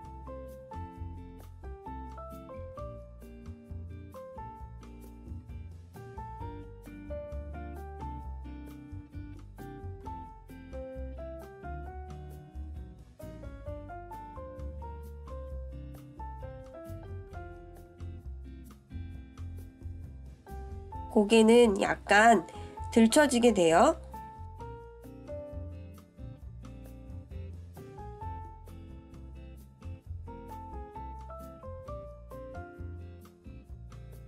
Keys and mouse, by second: 0.9-2.9 drag, 4.3-4.8 shift+middle drag, 9.7 click, 10.7-12.7 drag, 13.9 click, 15.5-20.2 drag, 20.9 click, 22.0-23.4 drag, 24.1 click, 24.8-27.2 drag, 29.0 click, 30.9 click, 32.3-34.2 drag.